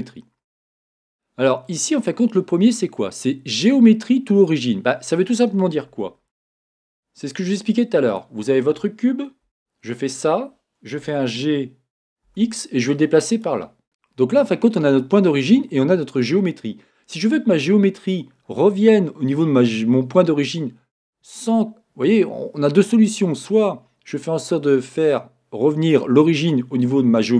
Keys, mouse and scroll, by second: 0.0 click, 0.6-8.2 middle drag, 8.2-9.4 drag, 9.4 Tab, 11.0 Tab, 13.3 g, 13.8-27.3 middle drag, 13.8-17.3 scroll up 2, 17.3-27.3 scroll up 1.